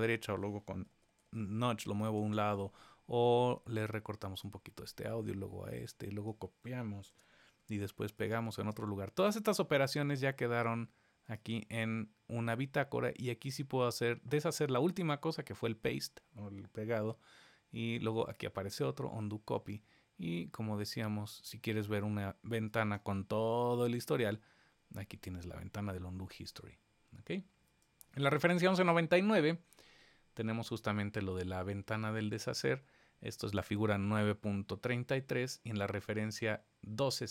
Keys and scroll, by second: 7.0 super+c, 8.5 super+v, 16.9 super+z.